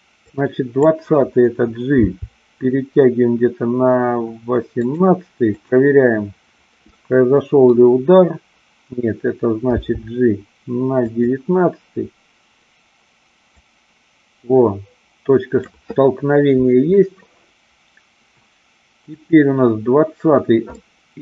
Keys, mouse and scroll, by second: 0.2 click, 2.0 g, 5.5 click, 7.0-7.8 middle drag, 9.8 g, 11.0 click, 13.5-15.6 drag, 19.1 click, 20.8-21.2 middle drag.